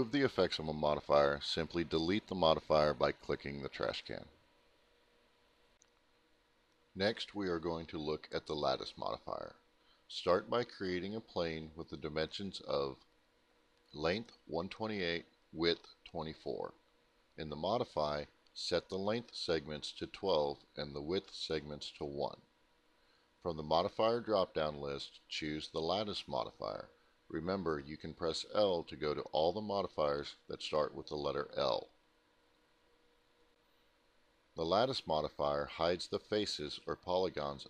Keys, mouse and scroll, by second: 2.1 click, 5.7 click, 5.9 click, 7.4 Delete, 8.8 click, 10.3 click, 11.3 click, 12.7 click, 13.8-16.7 typing, 16.9 Return, 18.8 click, 20.5 click, 21.1 click, 23.3 click, 28.3 click, 30.9 middle click, 35.9 alt+middle click, 37.5-37.6 scroll up 1.